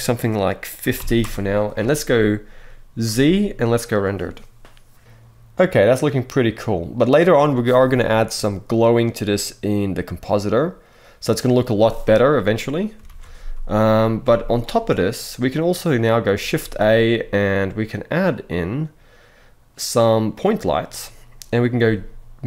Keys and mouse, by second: 2.7 z, 12.7 alt+a, 13.9 z, 15.2-15.7 middle drag, 16.3 shift+a, 20.6-21.1 middle drag, 21.5 g.